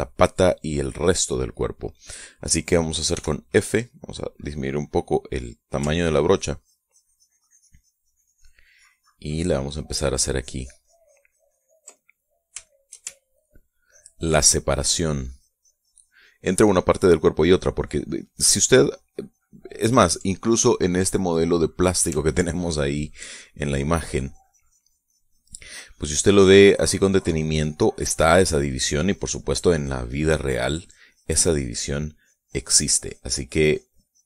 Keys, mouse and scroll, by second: 3.6 f, 5.4 click, 6.3-12.3 ctrl+drag, 12.4 ctrl+middle click, 13.1 shift+middle click, 14.2-20.4 ctrl+drag, 22.8-34.2 ctrl+drag.